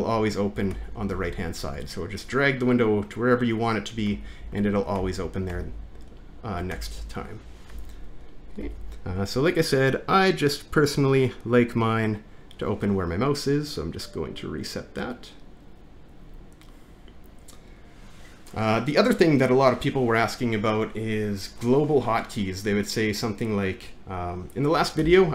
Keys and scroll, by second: 0.8 alt+`, 1.3 alt+`, 4.1 alt+`, 4.6 alt+`, 5.0 alt+`, 6.8 alt+`, 7.7 alt+`, 8.7 alt+`, 25.0 alt+`.